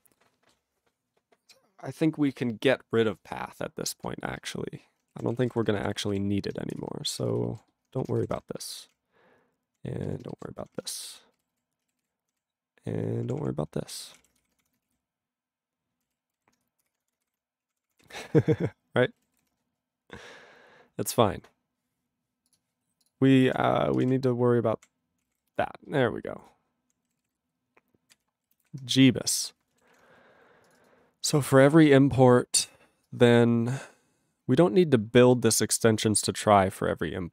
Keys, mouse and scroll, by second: 4.4 ctrl+g, 5.1-6.0 typing, 6.1 ctrl+s, 6.8 Return, 7.1 ctrl+a, 7.4 alt+f, 7.5 alt+b, 8.1 ctrl+>, 8.3 /, 8.4 /, 8.5 /, 8.6 ctrl+g, 9.0-9.7 ctrl+p, 10.0 ctrl+n, 10.4 alt+b, 10.7 ctrl+<, 10.7 ctrl+<, 11.1 /, 11.2 /, 11.5 ctrl+g, 12.1 ctrl+n, 12.3 scroll down 1, 12.4-13.0 ctrl+n, 13.2 ctrl+p, 13.4 ctrl+p, 14.2 ctrl+o, 14.5 Tab, 14.5 /, 14.8 *, 15.0 ctrl+a, 15.5-16.0 ctrl+n, 16.0 ctrl+e, 16.3 ctrl+n, 16.9 Return, 17.1 *, 17.7 ctrl+a, 17.7 ctrl+p, 17.9 ctrl+p, 17.9 ctrl+e, 18.5 ctrl+s, 19.4 ctrl+s, 19.8-20.8 scroll up 4, 20.8-21.5 scroll up 3, 21.5-22.5 scroll down 8, 22.5 click, 22.5 click, 23.0 click, 23.1 click, 23.5 ctrl+a, 23.9 ctrl+space, 24.0 ctrl+n, 24.0 ctrl+w, 24.1-24.8 ctrl+p, 25.2 ctrl+p, 25.3 ctrl+y, 25.3 ctrl+u, 25.6-26.8 ctrl+p, 27.3 ctrl+s, 27.4-28.1 ctrl+n, 28.1 ctrl+e, 28.6 ctrl+s, 29.3-29.9 scroll up 4, 29.9 ctrl+s, 30.7 click, 30.7 click, 30.8 click, 30.9 double click, 31.3 click, 31.4 click, 32.0-33.1 scroll down 6, 33.1 click, 34.2-35.3 scroll, 35.3 click, 35.6-36.2 scroll up 5.